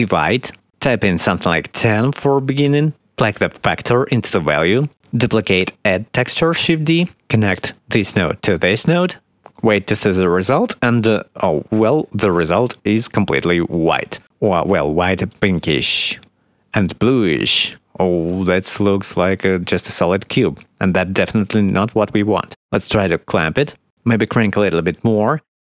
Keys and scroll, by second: 1.3 1, 1.5 0, 1.7 Return, 2.3 1, 2.4 0, 2.6 Return, 5.2 shift+d.